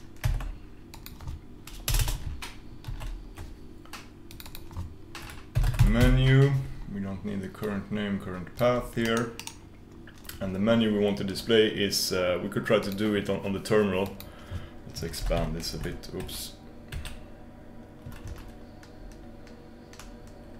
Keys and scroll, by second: 15.3 ctrl+super+k, 16.6 Escape.